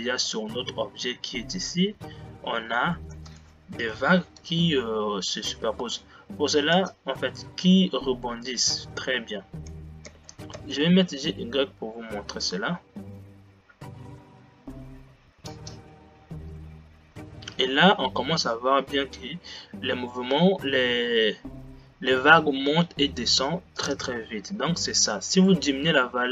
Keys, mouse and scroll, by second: 0.5-1.7 scroll up 3, 3.7 space, 4.6 Left, 6.0 space, 7.0-9.9 drag, 9.9 f, 10.7 g, 24.0-26.1 drag.